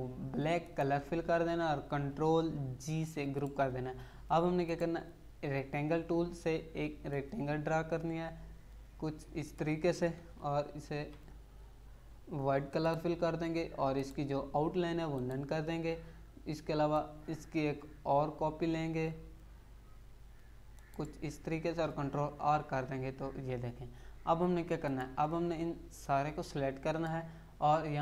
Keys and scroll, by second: 2.7 ctrl+g, 10.2 Down, 22.3 ctrl+r.